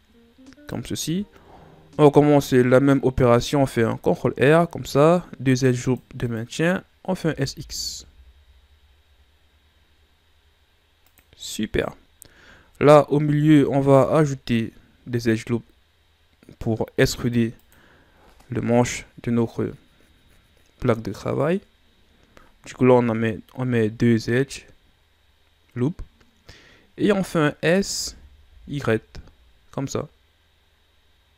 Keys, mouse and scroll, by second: 3.4 ctrl+r, 7.1 s, 12.0-13.2 scroll up 1, 13.2 ctrl+r, 27.9 s.